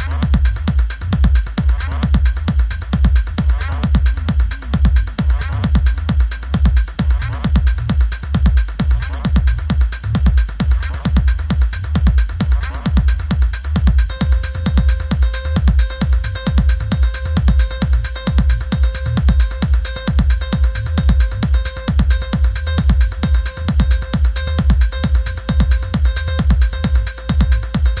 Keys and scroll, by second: 7.7 super+c, 8.1 super+f, 8.6 shift+Down, 9.5 shift+Up, 16.8 i, 21.0 super+c, 22.0 super+=.